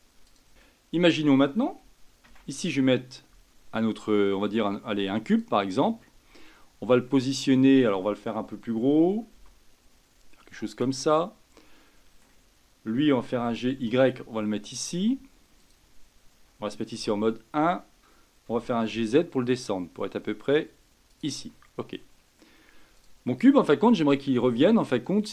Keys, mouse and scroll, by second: 0.2 drag, 0.6-2.2 shift+middle drag, 2.2 shift+a, 7.1-9.3 middle drag, 9.3 s, 11.1-13.3 middle drag, 13.3 g, 16.9 KP_1, 18.5 g, 21.5-22.9 middle drag, 22.9 click, 23.5-25.3 middle drag.